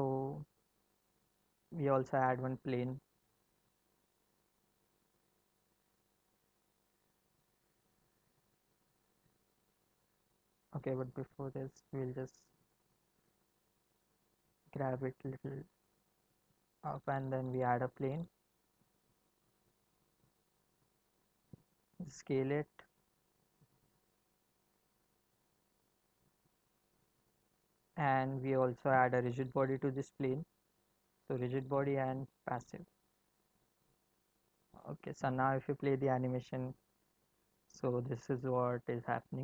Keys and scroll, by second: 4.6 shift+a, 10.9 ctrl+z, 13.8 g, 18.2 shift+a, 21.4 s, 24.0 s, 35.1 space.